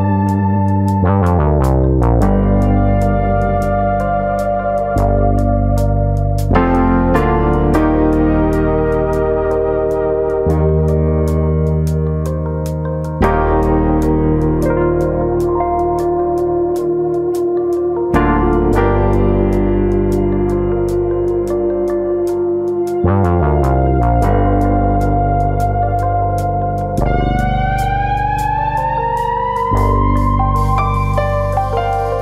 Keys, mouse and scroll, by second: 0.2 scroll down 2, 0.7 Tab, 1.1 shift+middle click, 1.4 middle click, 2.2 middle click, 2.6 Tab, 2.9 middle click, 4.3 click, 4.6 scroll up 2, 4.9 middle click, 6.8 click, 7.5 ctrl+click, 7.7 middle click, 8.6 g, 9.4 click, 9.6 middle click, 10.7 middle click, 11.4 alt+click, 11.6 middle click, 12.3 click, 13.5 middle click, 14.0 click, 14.2 middle click, 14.7 click, 15.5 middle click, 16.1 shift+click, 16.3 middle click, 16.9 click, 17.5 middle click, 18.1 click, 18.4 shift+click, 18.9 click, 20.2 alt+click, 20.5 middle click, 20.8 shift+middle click, 21.0 middle click, 21.7 click, 22.9 middle click, 24.0 3, 24.1 click, 24.5 shift+click, 24.8 middle click, 25.4 click, 26.4 middle click, 27.0 s, 29.3 middle click, 29.7 s, 30.4 click, 30.5 middle click, 31.7 2, 32.1 click.